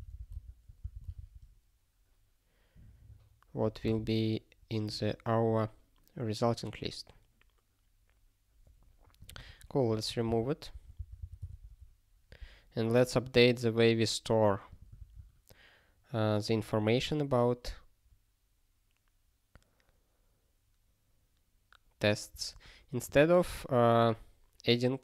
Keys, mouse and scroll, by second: 0.9 Return, 1.1 ctrl+s, 9.2 click, 9.5 ctrl+=, 10.3 ctrl+w, 10.7 ctrl+p, 11.0 ctrl+k, 11.2 ctrl+k, 11.5 ctrl+s, 12.4 scroll up 1, 14.7 click, 14.9 ctrl+a, 23.0 click.